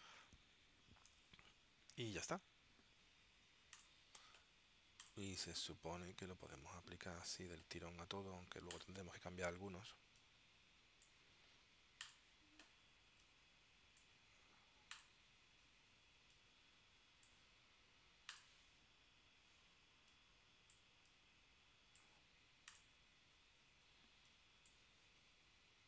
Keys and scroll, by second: 0.0-0.1 typing, 1.2 Tab.